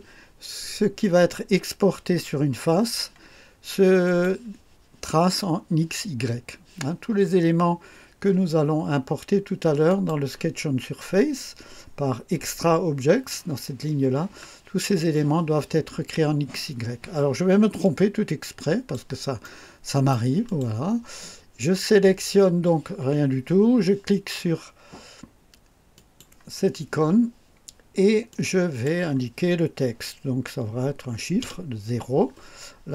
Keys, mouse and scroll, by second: 4.0 click, 9.8 click, 12.9 click, 17.8-19.1 drag, 19.4-20.3 right drag, 20.4 click, 25.9 click, 28.3 click, 31.4 0.